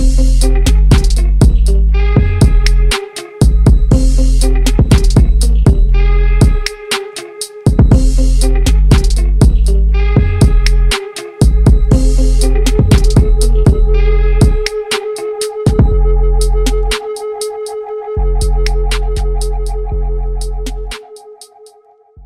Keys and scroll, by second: 12.5 ctrl+j.